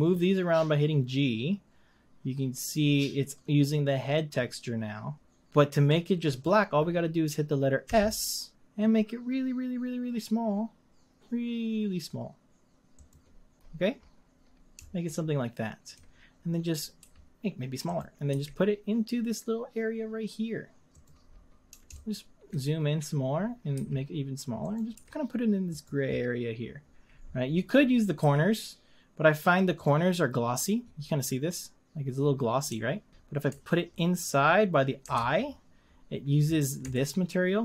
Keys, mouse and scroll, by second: 7.9 s, 17.0 s, 18.3 g, 23.7 s, 24.9 g, 31.1 scroll up 2, 31.4-31.9 scroll down 2, 32.1 scroll up 1, 33.1-35.2 scroll down 1, 35.2 ctrl+z, 35.8-36.2 scroll up 2, 36.4 scroll down 2, 37.0-37.6 ctrl+middle drag.